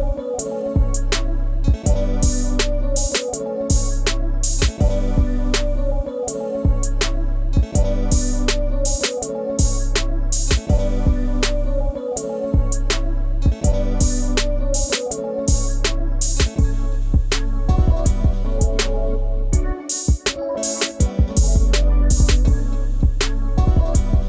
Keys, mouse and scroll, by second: 0.3 double click, 3.2 double click, 3.7 scroll down 1, 4.2 scroll up 1, 10.9 shift+click, 15.6 shift+click, 15.8 right click, 17.9 double click, 18.7 Left, 22.4 scroll down 1, 22.7 space, 22.7 super+click, 23.5-23.9 scroll down 1.